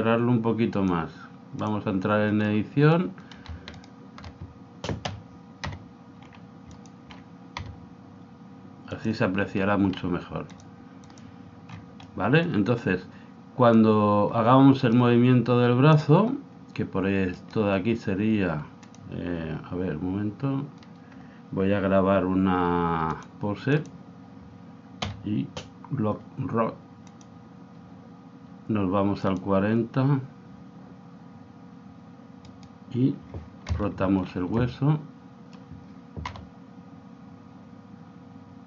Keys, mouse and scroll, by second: 0.7 click, 2.4-3.8 middle drag, 3.8-5.4 right drag, 5.1 o, 5.6 g, 7.6 g, 10.5 click, 11.6-13.9 middle drag, 13.7 click, 17.4-19.5 right drag, 18.9 click, 23.1 click, 25.0 i, 29.5 click, 32.5-34.2 right drag, 33.7 KP_3, 34.3-36.4 middle drag, 36.4 r.